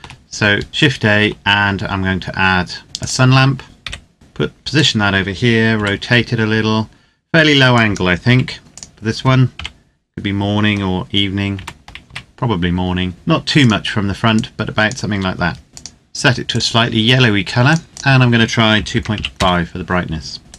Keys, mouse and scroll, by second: 2.9 click, 3.3-3.6 scroll down 1, 3.6 KP_1, 4.1 g, 4.5 click, 5.6 r, 7.5 click, 8.0 g, 8.6 click, 9.3 KP_7, 11.3 r, 11.8 z, 13.3 click, 18.5 KP_2, 18.7 KP_Decimal, 18.9 KP_5, 19.1 KP_Enter, 20.4 right click.